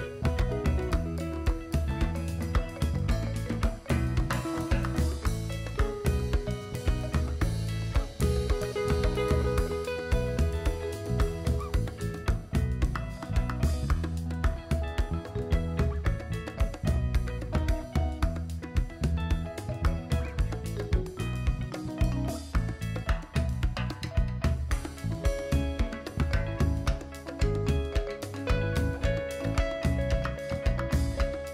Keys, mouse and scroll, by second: 0.9-1.9 drag, 2.8 s, 4.7-5.8 drag, 6.4-11.0 drag, 11.9 KP_7, 12.3 KP_1, 12.9-14.1 scroll up 3, 14.1-15.1 drag, 15.4 KP_7, 16.6-16.9 shift+middle drag, 17.0 shift+middle click, 17.6-18.0 shift+middle drag, 18.3-20.8 drag, 22.9-25.3 drag, 26.2 click, 26.8 shift+click, 27.8 KP_7, 29.1 super+c, 29.5 super+v, 30.6-31.1 drag.